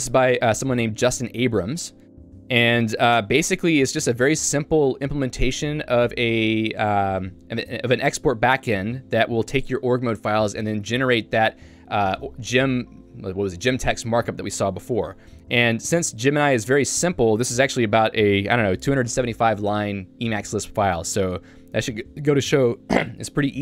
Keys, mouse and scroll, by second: 10.4 super+2.